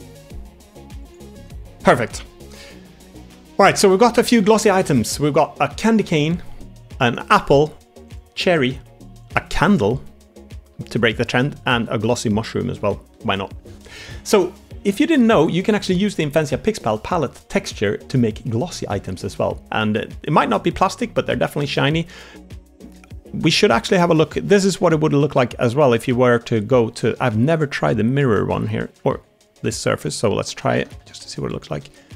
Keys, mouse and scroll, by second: 0.4 g, 1.6 click, 1.7 Tab, 1.7 3, 2.0 drag, 2.8 click, 2.8-3.2 middle drag, 3.7 shift+middle drag, 3.9 middle drag, 4.6 shift+middle drag, 4.9 middle drag, 6.9 click, 8.0 click, 9.2-9.9 drag, 9.9 middle click, 11.1 click, 11.4-11.7 middle drag, 12.1 shift+middle drag, 12.5 middle drag, 23.3 Tab, 24.1 middle click, 26.7 a, 27.2 shift+middle click, 27.7 a, 29.3 a, 29.8 shift+middle click, 30.7 a, 30.9 a, 31.1 b, 31.7 g.